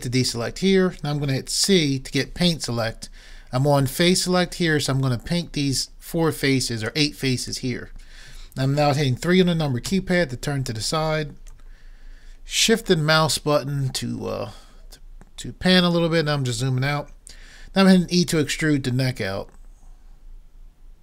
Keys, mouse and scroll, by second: 0.3 a, 1.8 c, 9.9 KP_3, 18.3 e.